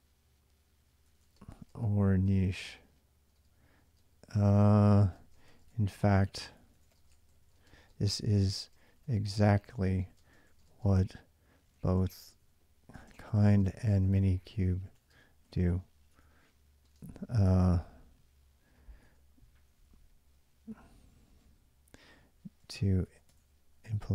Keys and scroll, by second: 0.6-16.8 typing, 18.6-20.0 typing, 21.7-24.1 typing.